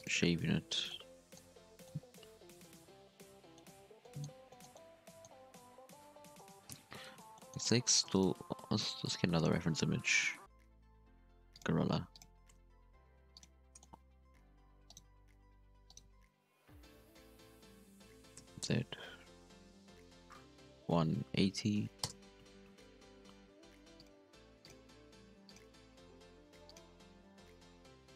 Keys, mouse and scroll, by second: 0.2-0.8 middle drag, 0.8 scroll down 2, 0.9-1.5 middle drag, 1.5-2.0 scroll down 1, 2.0-2.3 scroll down 1, 2.3 KP_1, 2.5 Tab, 2.8 scroll up 1, 2.9 scroll down 1, 3.1-3.5 middle drag, 3.5-3.9 scroll up 8, 3.9-4.4 scroll down 4, 4.0 middle drag, 4.4 shift+middle drag, 4.6 scroll up 1, 4.7-5.7 middle drag, 5.7 KP_1, 5.9 Tab, 6.6 KP_3, 6.9 alt+a, 7.3 shift+middle click, 7.5 scroll up 5, 8.1 alt+shift+right click, 12.7 g, 13.6-14.9 shift+middle drag, 14.9 right click, 15.7 h, 15.9 right click, 16.3 r, 22.6 g, 24.2 s, 26.1 g, 26.9 z, 27.4 g.